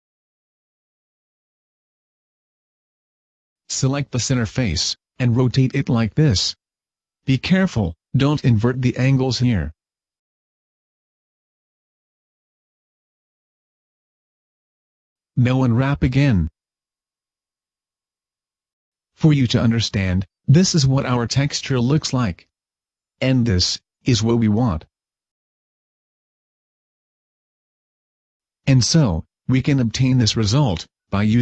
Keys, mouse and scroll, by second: 2.7 o, 2.7 r, 10.2 click, 10.2 r, 11.4 click, 13.0 click, 13.0 r, 15.4 click, 15.4 a, 15.7 a, 17.7 u.